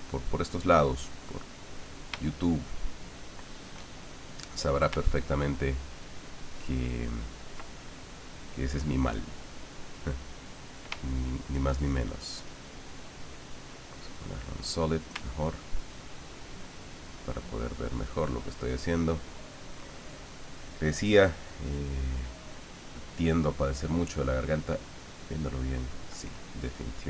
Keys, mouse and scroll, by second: 2.2-3.8 shift+middle drag, 5.4-7.6 ctrl+drag, 7.8-10.9 ctrl+middle drag, 11.0 shift+middle click, 13.2-14.3 drag, 15.4-19.8 ctrl+drag, 21.3-24.0 drag, 25.1 click, 26.4-27.0 drag.